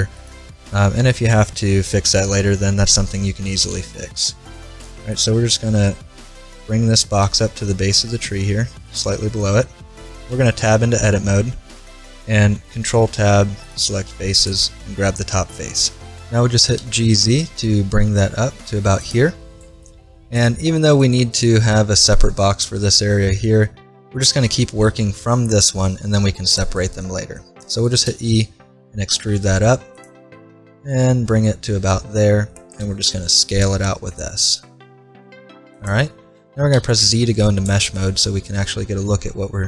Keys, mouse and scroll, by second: 2.2-4.0 middle drag, 3.5 g, 5.9 middle click, 6.2 click, 6.9-9.7 middle drag, 6.9 g, 10.3 Tab, 11.8 ctrl+Tab, 14.4-16.1 right drag, 16.5 g, 19.9 middle click, 20.1 click, 20.5-22.4 middle drag, 26.8 middle click, 28.1 e, 32.8 s, 36.7 z, 38.0-39.6 middle drag.